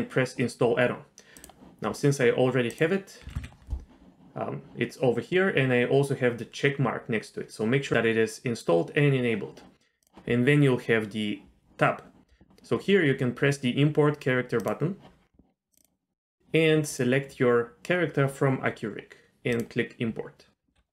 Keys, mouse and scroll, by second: 14.6 click.